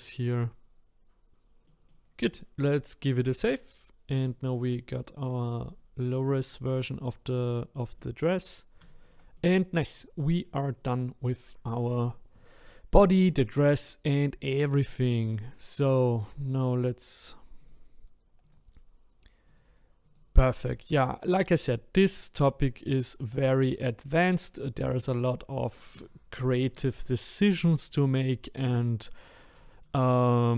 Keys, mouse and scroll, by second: 0.3 click, 1.3-4.3 middle drag, 4.3-5.8 drag, 6.3-6.9 scroll up 5, 6.9 scroll down 1, 7.5-8.5 shift+middle drag, 8.5-8.9 scroll down 1, 8.9-14.7 shift+middle drag, 14.7-16.3 drag, 16.3-16.9 scroll down 1, 16.9-17.7 scroll down 1, 17.7 click, 18.5 click, 19.5 click, 20.0 click, 20.7-24.5 middle drag, 24.5-25.1 scroll up 1, 25.1-27.6 scroll down 1, 28.9-30.5 middle drag.